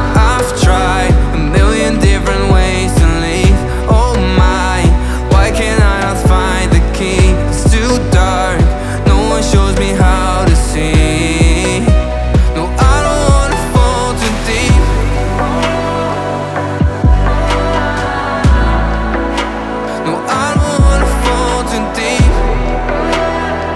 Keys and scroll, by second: 8.3 v.